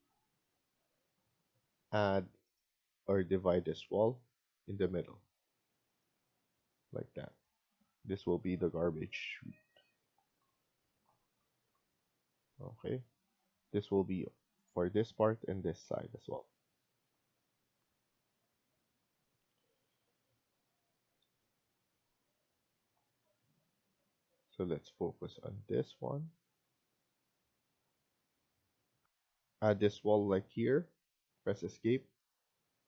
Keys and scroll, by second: 0.4 Escape, 0.6 Escape, 7.3 Escape, 7.6 Escape, 16.8 Escape, 28.9 F1, 29.0 Escape, 31.0 Escape, 31.4 Escape.